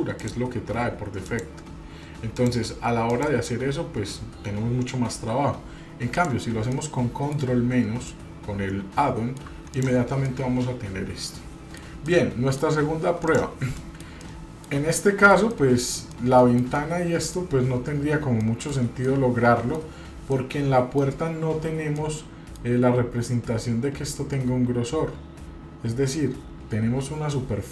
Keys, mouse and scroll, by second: 0.2-1.5 drag, 2.4-3.3 drag, 6.1 click, 6.7-7.3 middle drag, 8.0-9.4 middle drag, 9.7 click, 10.3-11.8 middle drag, 12.1-12.6 shift+middle drag, 12.8-13.3 scroll up 2, 13.2 click, 13.8 middle click, 14.2-14.7 shift+middle drag, 14.9 middle click, 15.5-15.9 shift+middle drag, 16.1-16.6 shift+middle drag, 16.8-17.4 middle drag, 17.7 scroll up 1, 18.4-18.8 shift+middle drag, 19.1-19.8 middle drag, 20.3-21.0 middle drag, 22.0-22.7 middle drag.